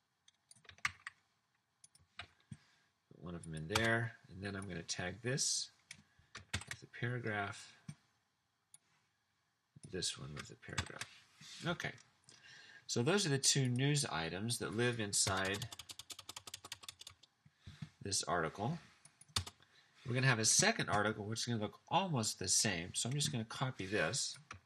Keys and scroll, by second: 1.0 super+x, 2.3 super+v, 3.8 Return, 6.6 shift+super+p, 10.9 shift+super+p, 15.3-18.1 typing, 19.4 BackSpace.